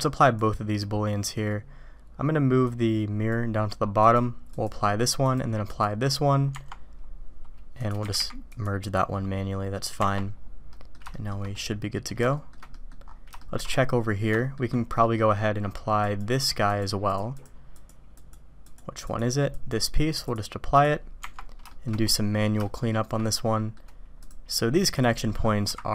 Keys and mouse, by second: 0.2-2.2 drag, 2.7-3.3 drag, 4.0-4.7 drag, 5.2-5.9 drag, 7.8 click, 8.0 g, 10.0 Tab, 10.7 drag, 11.1 shift+click, 11.5-12.1 drag, 12.2 shift+click, 12.7 click, 13.3 shift+drag, 14.3 shift+middle click, 15.0 middle click, 16.1 click, 16.5-17.5 drag, 17.8 click, 18.2 click, 18.7 click, 19.6 click, 20.3-21.0 drag, 21.7 shift+middle drag, 22.6-23.0 shift+drag, 23.3-23.8 drag, 24.9 click.